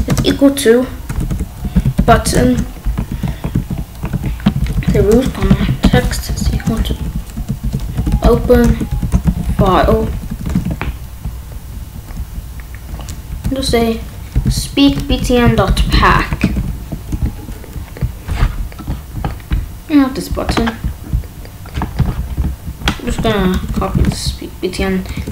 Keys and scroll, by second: 0.0-2.8 typing, 3.0 ctrl+s, 4.1-10.3 typing, 10.5 ctrl+s, 10.8 Down, 13.6 Return, 14.3-16.0 typing, 16.4 ctrl+s, 23.2 ctrl+x, 23.5 BackSpace, 23.8 ctrl+s.